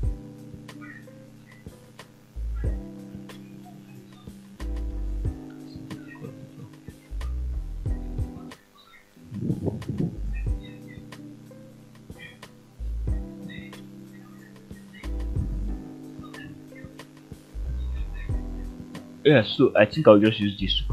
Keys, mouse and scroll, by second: 0.7 shift+z, 1.7 f, 2.3 scroll down 1, 9.4 shift+middle click, 10.1-12.8 middle drag, 13.1 shift+middle click, 13.6 middle click, 14.5 shift+middle click, 14.8 shift+scroll up 1, 16.8 scroll down 1, 17.4-19.4 middle drag.